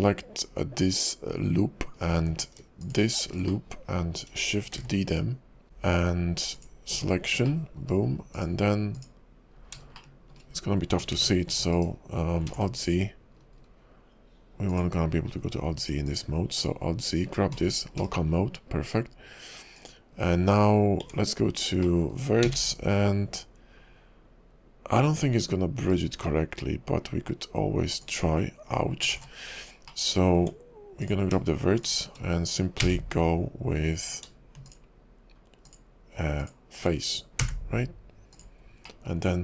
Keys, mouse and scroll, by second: 2.8 alt+shift+click, 3.6 middle click, 4.9 shift+d, 5.6 p, 6.9 Tab, 7.6 middle click, 8.4 click, 9.0 click, 9.8-10.1 scroll up 3, 10.1 shift+middle click, 11.2 alt+x, 12.5 alt+z, 13.5-14.1 scroll down 6, 14.7 click, 15.1-15.5 scroll up 8, 16.0 click, 16.6 click, 17.2-17.6 scroll down 4, 17.6 /, 18.0 /, 19.9 click, 20.4 scroll up 4, 21.0 Tab, 21.6-22.0 scroll down 4, 22.0 middle click, 22.4 a, 25.9 right click, 29.1 ctrl+z, 29.6-30.0 scroll up 3, 30.0 middle click, 30.4 Tab, 31.0 click, 31.8 shift+click, 32.8 f, 34.1 click, 34.6 shift+click, 35.6 click, 36.4 click, 37.4 f, 38.3 click, 39.0 middle click.